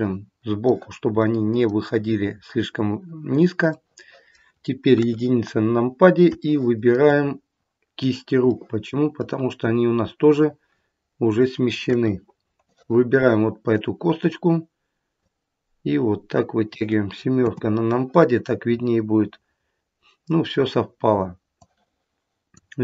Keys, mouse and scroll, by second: 1.1 middle click, 3.6 middle click, 4.8 KP_1, 5.4-6.1 scroll down 4, 6.5 shift+middle click, 7.1-7.5 scroll up 2, 8.4 middle click, 11.7 KP_1, 12.6 click, 15.2 click, 17.3 KP_7, 18.7-19.3 scroll up 2, 21.4 click.